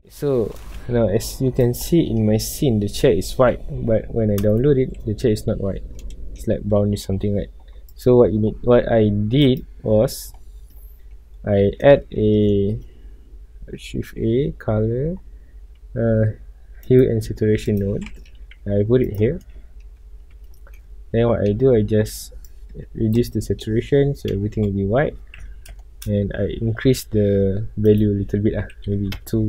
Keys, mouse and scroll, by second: 0.2 alt+a, 0.6 scroll up 1, 3.6 scroll up 1, 4.7-5.1 shift+middle drag, 5.1 scroll up 1, 6.0-7.4 middle drag, 7.4 scroll down 1, 8.2 click, 9.4 click, 19.1 g, 19.2 click, 20.0-22.5 shift+middle drag, 22.5-23.6 drag, 23.6-24.6 middle drag, 24.6 KP_0, 25.1 scroll up 1, 25.7 a, 25.9-26.2 shift+middle drag, 26.2 scroll up 1, 26.9-29.2 middle drag, 29.2 click, 29.3 KP_Enter.